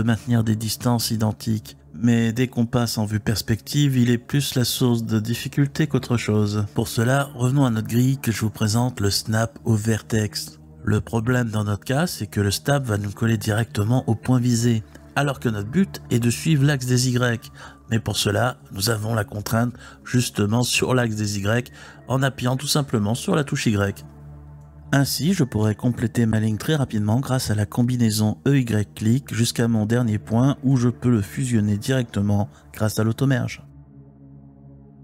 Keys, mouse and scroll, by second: 2.0 click, 2.8 click, 3.4 g, 5.4 f, 5.8 click, 8.1-10.3 drag, 12.8 e, 19.1 y, 22.8 click, 23.5 e, 23.8 click, 25.2 ctrl+z, 26.8-31.0 typing, 27.1 click, 27.9 click, 28.7 click, 29.3 click, 30.0 click, 30.6 click, 31.8 click, 34.0 e, 34.6 click.